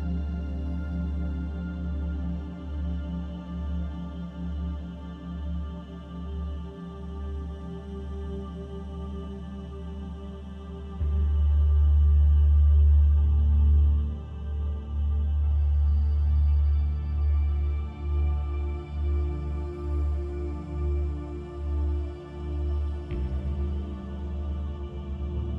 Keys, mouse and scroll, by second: 0.3 middle click, 0.4 shift+middle click, 3.0 click, 4.5 alt+click, 13.0 click, 16.0 click, 23.3 click.